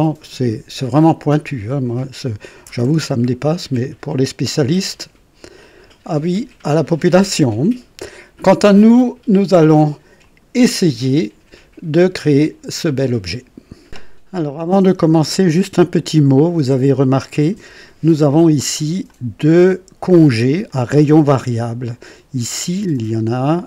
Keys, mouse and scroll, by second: 4.2-4.6 scroll down 2, 10.2 click, 12.8 click, 13.9 space, 15.8-17.9 drag, 19.0-20.4 drag, 20.7-21.7 drag, 22.9-23.6 drag.